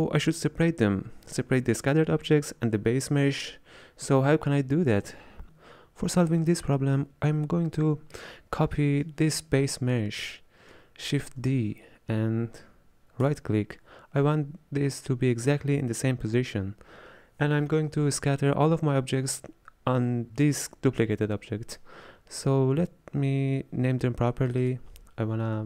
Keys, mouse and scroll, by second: 11.3 shift+d, 24.5-25.6 drag.